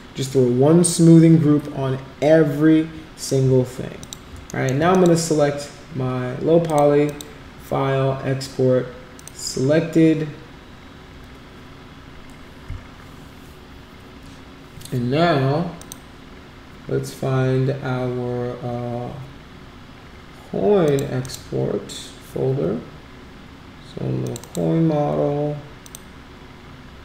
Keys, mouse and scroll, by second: 4.0 click, 4.5 alt+middle click, 4.9 click, 6.6 click, 7.0 click, 9.1 click, 15.7 click, 20.8 click, 21.2 click, 24.2 click, 24.4 click, 25.8 click.